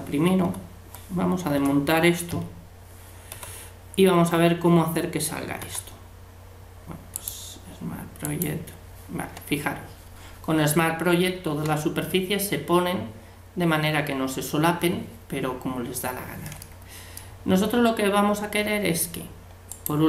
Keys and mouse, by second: 0.4 u, 2.3 a, 3.4 u, 5.7 u, 16.6 middle click.